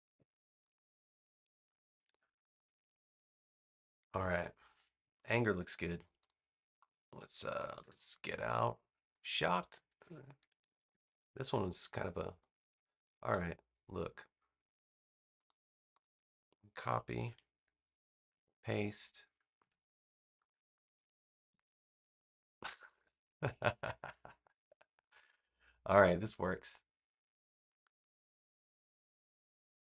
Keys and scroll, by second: 7.5 super+-, 8.6 space, 10.5 super+=, 17.1 super+c, 18.2 super+v, 19.5 a, 21.4 BackSpace.